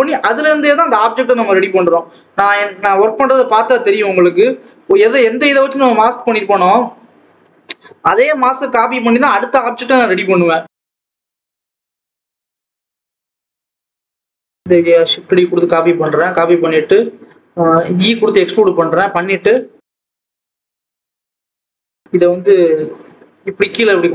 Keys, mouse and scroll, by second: 0.2 ctrl+i, 1.2 x, 2.0 l, 2.8 click, 3.0-3.8 scroll up 2, 3.9 3, 4.2 click, 4.4-4.8 scroll down 1, 4.8 g, 7.3 click, 8.2 g, 10.2-10.9 scroll up 1, 10.9 click, 12.6 click, 12.9 scroll up 1, 13.2 g, 14.2 click, 14.4 e, 16.3 click, 18.2 click, 19.6 g, 20.8 scroll down 1, 20.9 ctrl+z, 21.3 shift+click, 21.5 g, 22.4 KP_1.